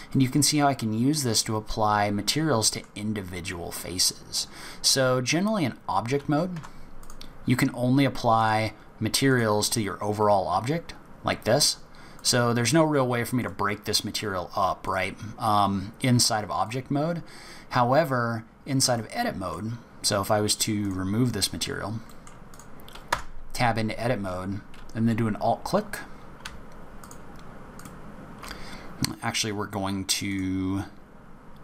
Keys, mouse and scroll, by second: 0.1 middle click, 3.2-4.0 scroll down 2, 3.7-4.3 scroll up 2, 4.3-5.0 scroll down 2, 6.5 Tab, 7.0 click, 8.4 click, 12.1 click, 14.8 click, 17.7-18.2 scroll up 2, 18.2 scroll down 3, 18.5-19.0 scroll up 5, 19.0 middle click, 20.8 click, 21.4 scroll down 2, 21.7 scroll up 2, 22.1 middle click, 22.5 click, 23.1 Tab, 27.0 alt+click, 27.7 alt+click, 30.2 click.